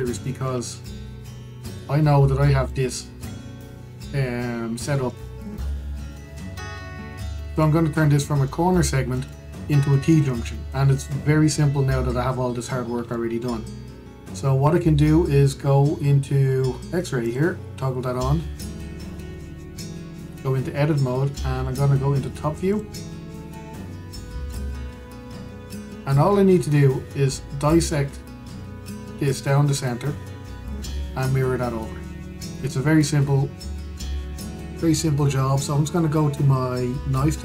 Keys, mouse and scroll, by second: 0.5-0.9 scroll up 2, 0.9-2.5 shift+middle drag, 2.5 click, 3.7-5.3 scroll down 1, 5.6-6.3 shift+middle drag, 6.3-6.6 scroll up 1, 6.6-7.5 shift+middle drag, 7.5-7.9 scroll down 1, 7.9-13.5 shift+middle drag, 13.5-13.8 scroll up 2, 13.8 shift+middle click, 14.7-17.9 scroll up 2, 17.9-19.8 drag, 19.8 Tab, 22.1-23.4 scroll down 2, 23.4 click, 24.0-24.6 scroll up 2, 24.6 shift+middle click, 25.3-25.7 scroll up 2, 25.7-28.8 scroll down 2, 32.9-33.3 scroll down 1, 33.3 shift+middle click, 33.6-34.1 scroll up 1.